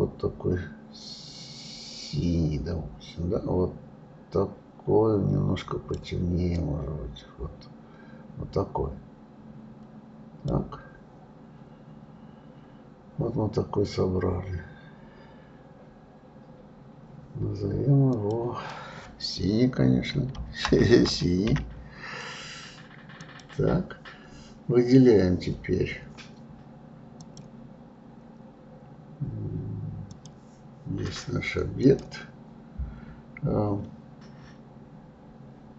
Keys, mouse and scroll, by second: 18.1-21.2 drag, 27.2-30.2 drag, 31.0 click, 31.8 click.